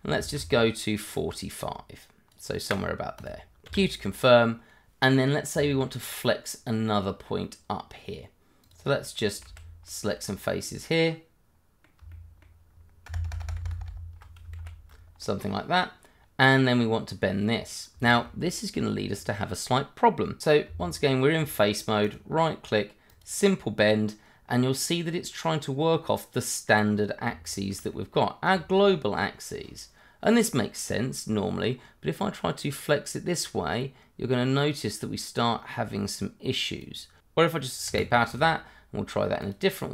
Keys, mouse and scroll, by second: 0.3 shift+click, 3.2 click, 3.7 q, 4.1 middle click, 5.8 shift+middle click, 6.8 middle click, 8.6 click, 9.4 shift+z, 9.9 shift+middle click, 10.2 scroll up 1, 10.5 middle click, 12.3 shift+middle click, 13.0 ctrl+KP_Add, 14.6 shift+z, 14.9 shift+scroll down 2, 15.2 middle click, 16.2 scroll up 1, 16.7 middle click, 17.6 scroll up 1, 18.0 shift+middle click, 18.6-19.0 scroll down 1, 20.4 Tab, 22.0 right click, 23.1 click, 25.1 middle click, 26.5 middle click, 26.8 scroll up 1, 27.5 shift+middle click, 28.1 middle click, 32.6 click, 37.9 Escape, 38.3 right click, 39.4 click.